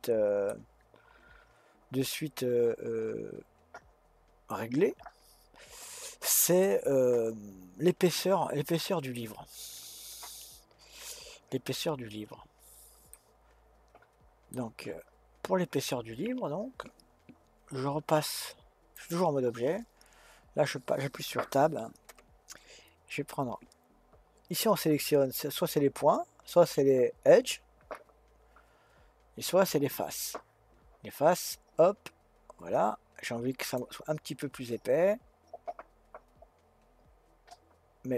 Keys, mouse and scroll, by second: 5.9-6.6 scroll down 1, 6.6-9.6 middle drag, 11.8-12.4 scroll up 1, 12.4-13.1 scroll down 1, 13.1-16.1 middle drag, 18.9 click, 31.3 click, 33.8-35.1 drag.